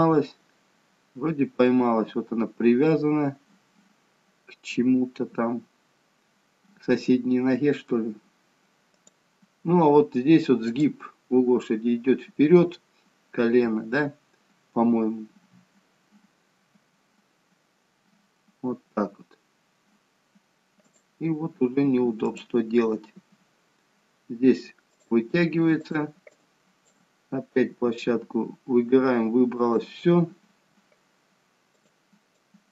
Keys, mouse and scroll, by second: 10.7 click, 17.0 g, 22.3 click, 23.3 g, 26.0 click, 27.2 click, 27.9 g, 31.9 click, 32.4 click.